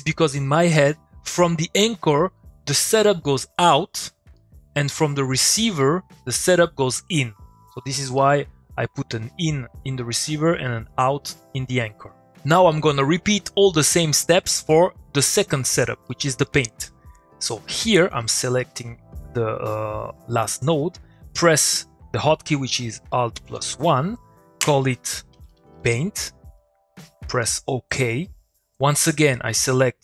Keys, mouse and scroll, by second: 4.0 middle click, 4.1 click, 4.3 middle click, 5.9 click, 6.1 middle click, 7.9 middle click, 15.7 click, 16.1 middle click, 23.1 middle click, 23.3 alt+1, 25.2 alt+1, 25.3-27.0 typing, 27.9 click.